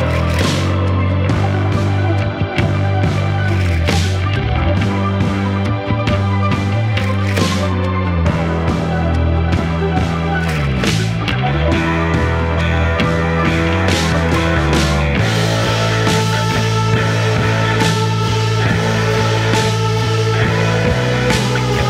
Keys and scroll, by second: 3.1 3, 16.2 ], 17.5 F1, 17.6 F2.